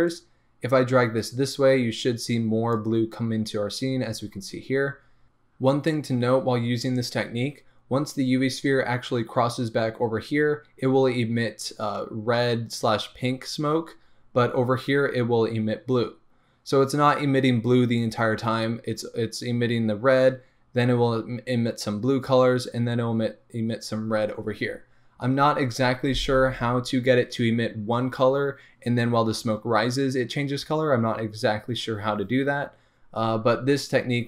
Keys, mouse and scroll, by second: 0.3-34.2 drag.